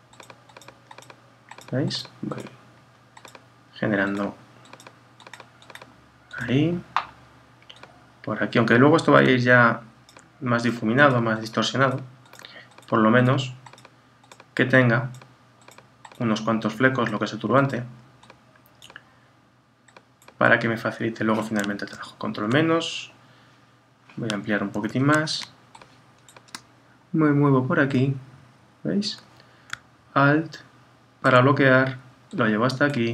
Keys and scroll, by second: 21.9 super+-, 24.7 super++.